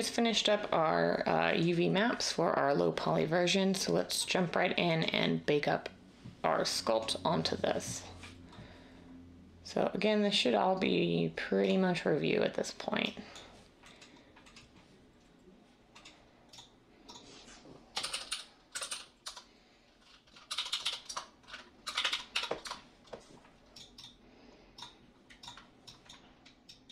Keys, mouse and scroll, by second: 18.0-22.6 typing.